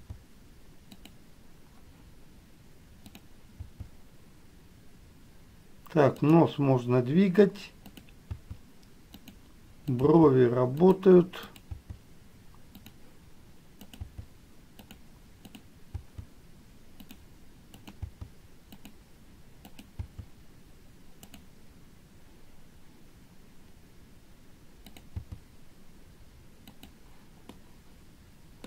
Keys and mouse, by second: 0.0 g, 0.0 click, 3.3 click, 8.1 click, 10.2 click, 11.7 click, 11.9 g, 15.6 click, 17.9 click, 20.1-25.3 drag, 27.0 g, 27.8-28.6 middle drag.